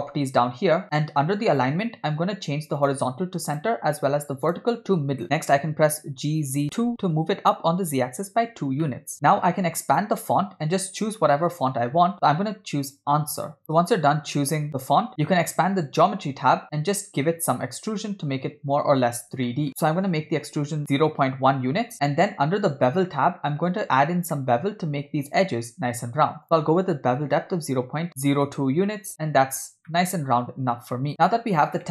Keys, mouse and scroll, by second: 2.8-3.7 drag, 4.5-5.2 drag, 5.2 ctrl+z, 5.2 shift+middle click, 5.2-5.7 scroll up 1, 5.8 g, 8.9 middle click, 9.9 click, 13.5 click, 15.5 click, 18.5-19.1 scroll up 2, 19.5 shift+middle drag, 19.7-20.8 drag, 20.8 BackSpace, 21.9-23.3 scroll down 1, 23.3-23.8 scroll down 3, 23.8-24.4 scroll up 3, 24.4-25.0 shift+middle drag, 25.0-26.4 scroll up 1, 26.4-28.1 drag, 30.0-31.1 shift+middle drag, 31.2-31.9 scroll down 1.